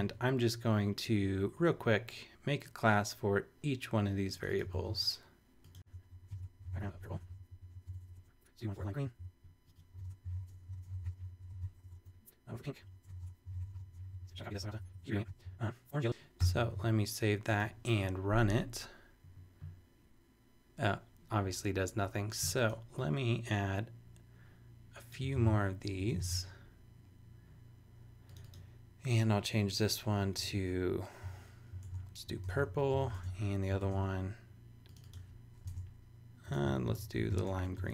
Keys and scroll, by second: 4.7 super+c, 5.8-7.6 typing, 7.8 shift+super+BackSpace, 8.0 Down, 8.1 Return, 8.7 super+c, 8.9 super+Down, 9.6-14.6 typing, 14.7 shift+Up, 14.9 super+Right, 15.0 super+Return, 15.2 super+v, 16.4 super+s, 25.3 super+c, 25.5 super+Right, 25.9 Return, 30.5 super+Tab, 31.8 super+Tab, 32.3 super+p, 32.3-33.4 typing, 35.7 super+Tab, 36.8-37.9 typing.